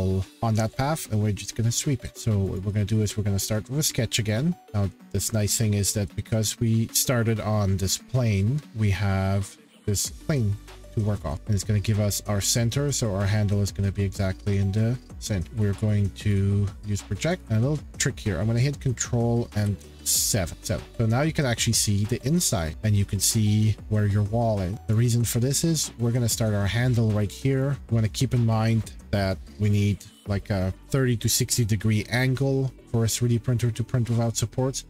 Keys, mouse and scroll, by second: 2.5 click, 3.6 middle click, 5.2 shift+middle click, 7.3 middle click, 9.6-12.5 shift+middle click, 10.7 click, 11.3-12.5 scroll, 15.4 p, 15.7-16.1 scroll, 16.3 click, 17.4 click, 19.5 ctrl+6, 19.9 ctrl+7, 21.2-21.6 scroll, 22.1 scroll, 24.9 click, 27.6 click.